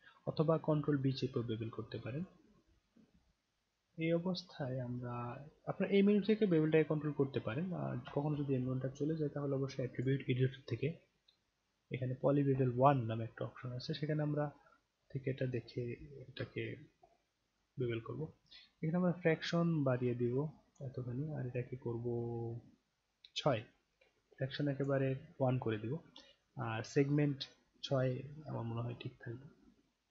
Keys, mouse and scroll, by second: 2.2 click, 10.0 click, 14.9-15.2 scroll up 2, 16.5 alt+middle click, 17.1 alt+right click, 19.3-20.8 drag, 21.5-23.3 drag, 24.3-24.8 drag.